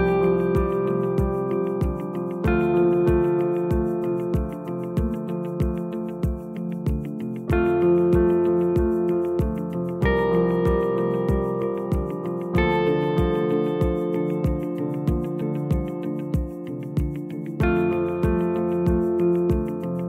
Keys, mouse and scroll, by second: 2.3 click, 3.9 r, 7.3 click, 8.5-10.2 scroll up 1, 10.2 g, 15.7 click, 16.5-16.8 scroll up 1, 17.1 r.